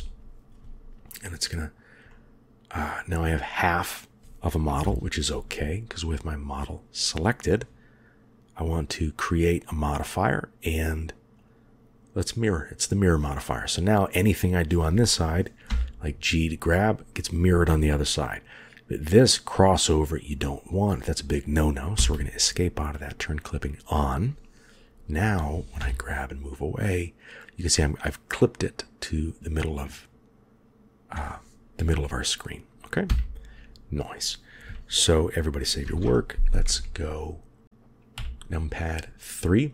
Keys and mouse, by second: 1.0 middle click, 2.0 middle click, 3.2 middle click, 4.7 KP_1, 5.9-6.5 drag, 9.9 click, 15.6 g, 23.2 click, 25.7 g, 35.7 ctrl+s, 36.5 KP_1, 38.1 KP_3.